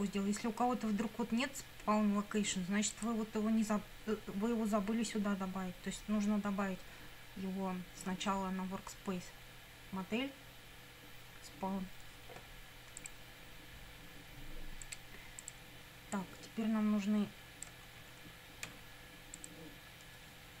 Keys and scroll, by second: 18.7 ctrl+c.